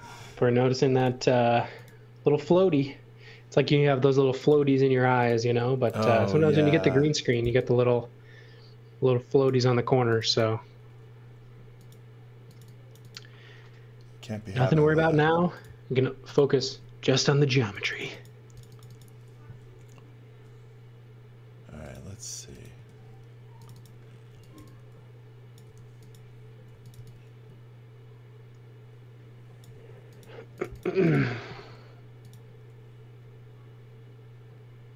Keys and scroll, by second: 3.6 space, 5.0 space, 6.9-7.9 typing, 9.6 space, 14.2 l, 16.5 space, 19.7 l, 22.7 space, 24.0-27.4 typing, 29.7 space, 31.5 s.